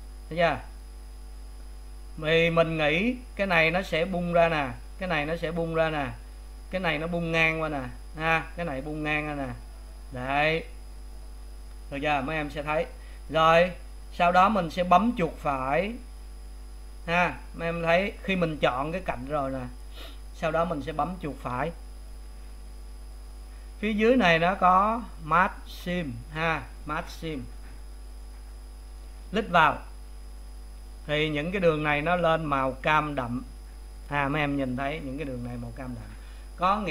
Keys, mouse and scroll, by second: 6.3-17.6 middle drag, 17.6 right click, 30.5 right click, 36.4-36.9 middle drag.